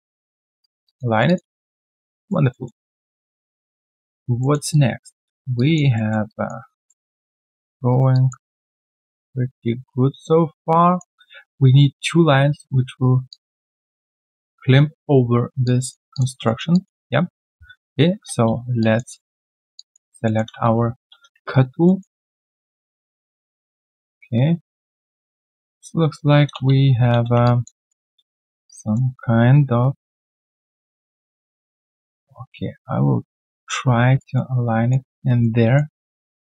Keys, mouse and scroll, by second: 0.8 alt+click, 1.1 alt+right click, 1.2 alt+click, 1.8 alt+middle click, 2.2 alt+click, 2.5 alt+middle click, 2.9 alt+click, 3.9 alt+click, 4.4 alt+middle click, 4.7 alt+click, 5.2 alt+middle click, 5.5 alt+click, 5.9 alt+middle click, 6.3 alt+click, 6.8 alt+middle click, 7.9 alt+right click, 8.1 alt+click, 8.5 alt+middle click, 8.8 alt+click, 13.3 alt+click, 15.6 alt+click, 16.1 alt+click, 16.4 alt+middle click, 16.7 alt+click, 18.5 ctrl+shift+x, 18.8 alt+click, 19.7 alt+click, 20.2 alt+middle click, 20.5 alt+middle click, 21.5 alt+right click, 21.8 alt+middle click, 22.1 alt+right click, 22.5 alt+middle click, 26.5 space, 27.1 space, 27.4 alt+click, 27.7 alt+right click, 28.0 alt+middle click, 28.2 alt+right click, 28.7 alt+middle click, 33.4 ctrl+click, 34.0 ctrl+click, 34.0 alt+right click, 34.3 alt+middle click, 35.0 alt+right click, 35.4 alt+middle click.